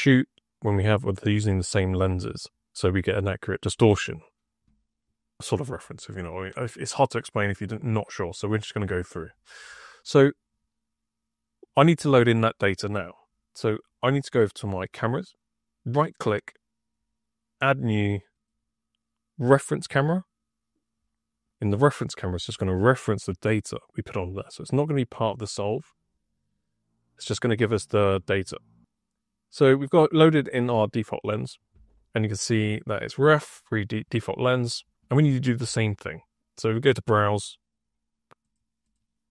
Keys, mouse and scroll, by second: 10.2 click, 15.7 right click, 17.5 click, 18.2 click, 19.4 click, 21.3 click, 25.0 click, 25.2 click, 31.1 click, 36.8 click, 38.3 click, 38.8 click.